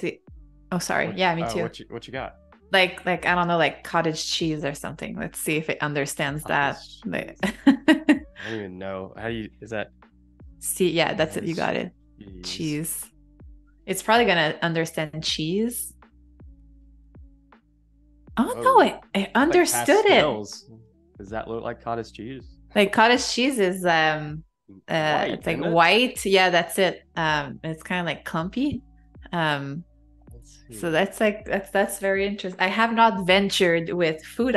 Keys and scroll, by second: 9.8-13.3 typing, 13.6 Return.